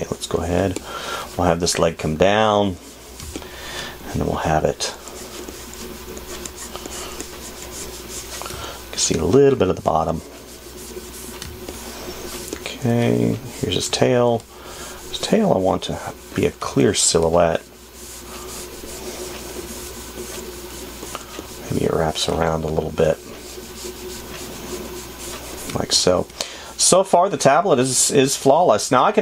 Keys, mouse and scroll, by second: 22.9 space, 26.1 space, 28.5 space.